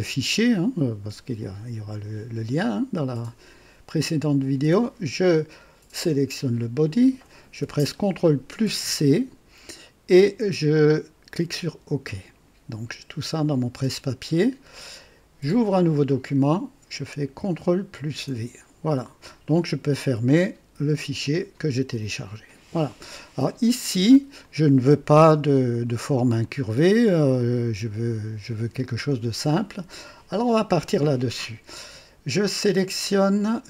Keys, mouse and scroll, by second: 5.9 click, 8.6 ctrl+c, 11.5 click, 16.0 click, 17.9 ctrl+v, 21.2 click, 22.8-23.6 right drag, 23.7-24.3 drag, 24.4-25.0 drag, 25.2 KP_1, 26.4-28.0 drag.